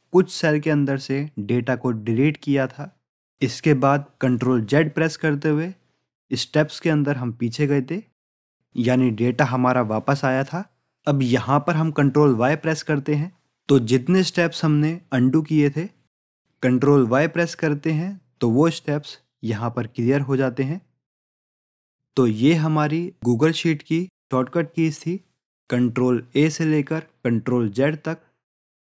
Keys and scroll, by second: 14.4 ctrl+y, 16.3 ctrl+y, 17.3 ctrl+y.